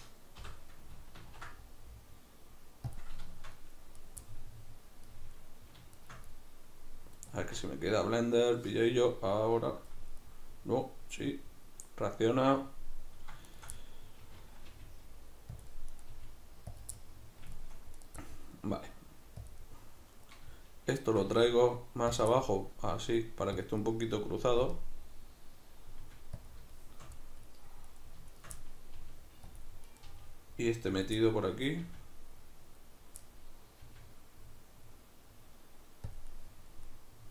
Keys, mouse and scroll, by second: 0.4 l, 1.2 ctrl+t, 3.0 click, 4.0 right click, 4.3-13.5 middle drag, 13.5 shift+right click, 13.8-15.9 middle drag, 14.7 g, 15.6 click, 15.9 right click, 16.1 middle click, 16.1 g, 16.8 click, 17.0-18.0 middle drag, 18.0 right click, 18.2-19.5 middle drag, 18.7 g, 19.5 click, 19.6-21.0 middle drag, 21.0 shift+right click, 21.3 g, 22.2 click, 22.4-23.7 middle drag, 22.9 g, 23.7 click, 23.9-27.9 middle drag, 26.1 g, 26.5 click, 27.9 right click, 28.3 shift+right click, 28.6-29.7 middle drag, 29.0 g, 29.7 click, 29.9 right click, 30.1 g, 31.1 click, 31.2-36.2 middle drag, 31.9 g, 32.8 click, 33.9 g, 36.2 click, 36.3-37.3 middle drag.